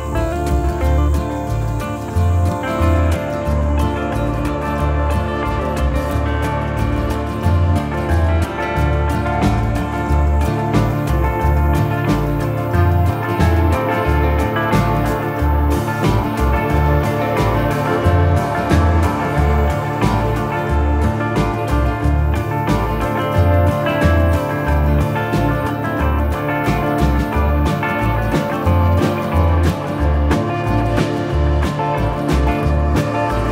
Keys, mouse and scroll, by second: 3.7 middle click, 4.5 shift+middle click, 6.1 click, 10.6 middle click, 13.2 click, 17.9 middle click, 19.1-19.5 scroll up 3, 19.5 middle click, 21.0-21.5 scroll down 2, 21.3 middle click, 26.9 middle click, 29.3 middle click, 29.3 click, 31.9-32.3 scroll up 1.